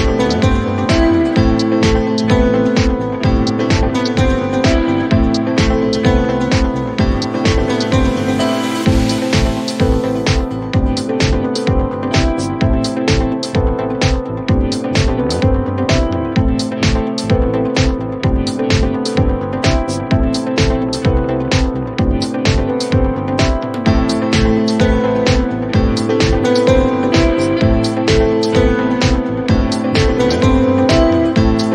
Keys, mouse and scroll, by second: 1.3 click, 9.3 click, 30.9 click.